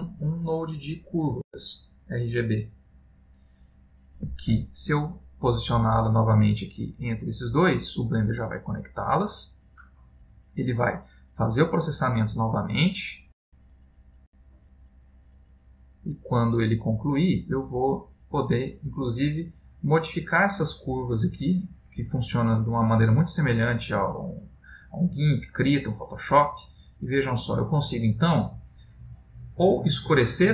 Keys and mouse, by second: 19.5 click, 28.2 click.